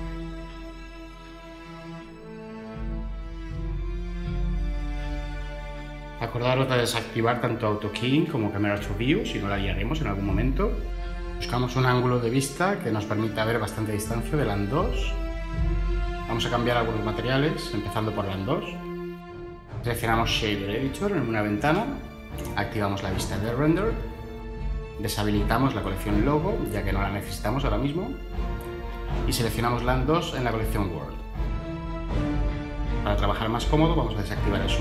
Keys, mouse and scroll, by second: 8.7 n, 15.9 n.